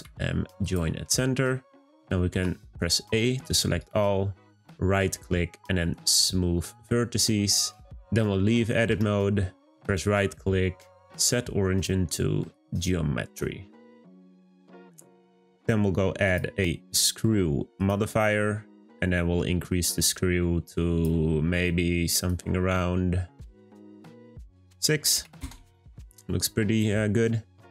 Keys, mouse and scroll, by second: 3.7-7.9 right drag, 7.9 Tab, 9.8-12.8 right drag, 13.4 scroll down 2, 14.2-15.4 middle drag, 15.4-16.2 scroll up 1, 16.2-18.4 drag, 18.4-19.6 middle drag, 19.6-21.3 drag, 21.3-22.3 scroll down 3, 22.3-27.1 drag, 27.2-27.7 scroll down 2.